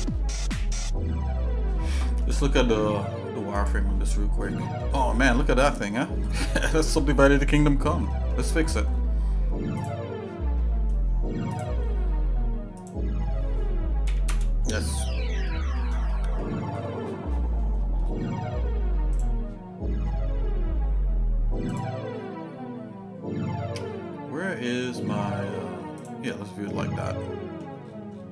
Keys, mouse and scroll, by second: 2.0 middle click, 3.5 click, 4.5 shift+middle click, 5.1-5.4 scroll up 2, 5.4 scroll down 1, 5.6-6.1 scroll up 4, 6.1-6.4 scroll down 3, 6.4 scroll up 1, 6.6-7.0 scroll down 2, 6.7-7.0 scroll up 1, 7.3 scroll down 2, 7.5 scroll up 1, 7.6-7.9 scroll down 2, 8.1 middle click, 8.6-9.1 scroll up 2, 9.8 click, 11.7 click, 12.8-14.5 drag, 15.5 shift+middle click, 16.1 middle click, 16.7-17.3 scroll up 4, 17.3 scroll down 1, 17.5 scroll up 2, 17.7-18.3 scroll down 3, 19.1 click, 21.7-26.4 drag, 26.8 shift+middle click, 27.8 scroll down 1, 27.9 scroll up 1, 28.0-28.3 scroll down 2.